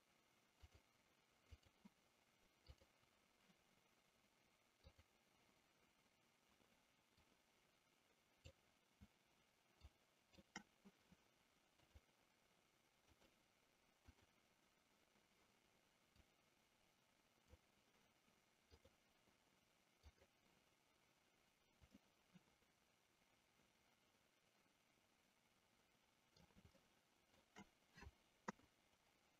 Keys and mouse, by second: 0.7-1.8 drag, 2.8 click, 4.9 click, 7.3-8.6 drag, 9.8-10.5 shift+drag, 11.9-13.3 drag, 14.3 click, 16.2-17.7 drag, 20.0 click, 21.9-27.6 middle drag, 28.6 KP_3.